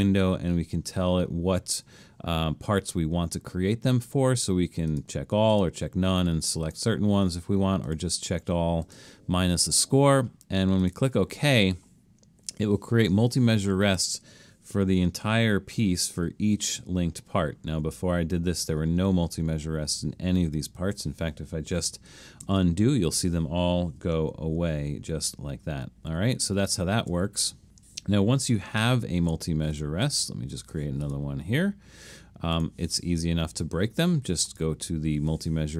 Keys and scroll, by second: 16.1 alt+super+., 16.6 alt+super+., 17.7 alt+super+., 19.3 alt+super+., 20.2 alt+super+,, 22.5 super+z, 24.7 alt+super+., 25.2 alt+super+,, 25.6 alt+super+,, 26.2 alt+super+,, 26.7 alt+super+,, 29.0 super+=, 29.2 super+=.